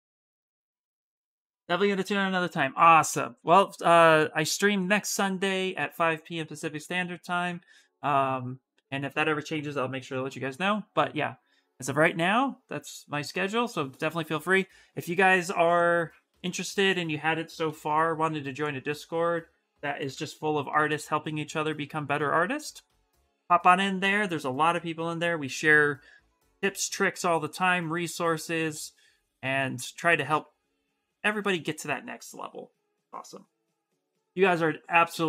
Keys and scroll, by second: 17.4 ctrl+c, 19.8 ctrl+v, 22.1 Return.